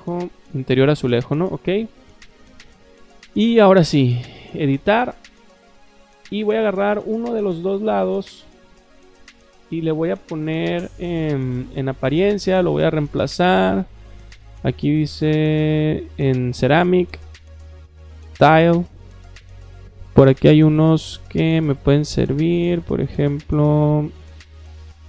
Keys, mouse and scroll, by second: 0.0-0.2 typing, 1.1 click, 4.2 click, 7.3 click, 8.0 click, 11.5 click, 12.5 click, 13.6-13.9 drag, 14.9 click, 16.5 click, 17.1 click, 18.2 click, 19.5 middle click, 20.5 middle click, 21.3-23.2 middle drag, 23.7 middle click.